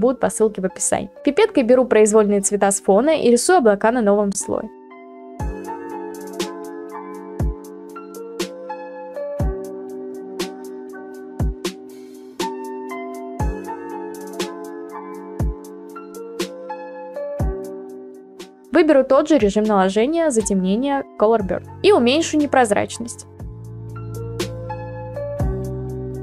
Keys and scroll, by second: 2.9 ctrl+z, 4.5 ctrl+z, 6.1 ctrl+z, 7.0 ctrl+z, 9.5 ctrl+z, 10.5 ctrl+z, 11.1 ctrl+z, 12.1 ctrl+z, 12.9 ctrl+z.